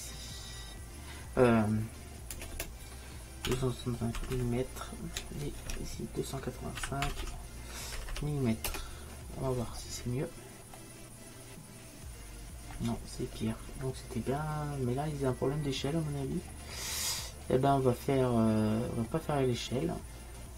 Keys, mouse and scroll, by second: 2.6 BackSpace, 4.4 m, 8.2 m, 16.3-19.0 middle drag.